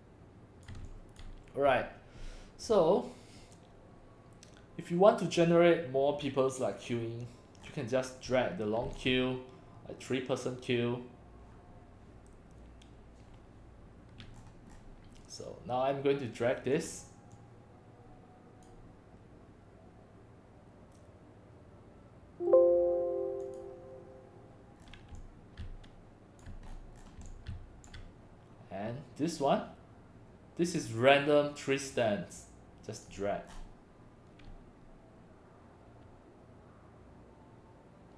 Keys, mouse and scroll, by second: 0.8 x, 0.9 click, 7.6 scroll down 1, 8.3 x, 8.3 click, 14.4-14.8 scroll down 3, 16.8 click, 17.4-18.6 drag, 23.4 click, 24.8 scroll down 1, 25.1 x, 25.2-26.4 drag, 25.6 c, 26.7 scroll up 3, 27.0 scroll down 2, 27.2 x, 27.3-27.9 drag, 27.5 c, 30.7 click, 31.9-33.1 drag, 33.5 scroll down 1.